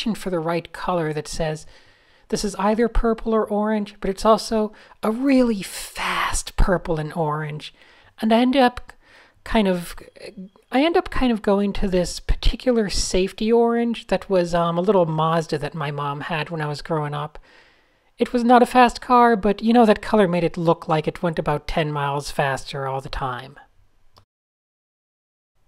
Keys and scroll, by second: 0.5 Tab, 1.2 Tab, 1.5 Tab, 1.9 Tab, 5.2 Tab, 6.0 Tab.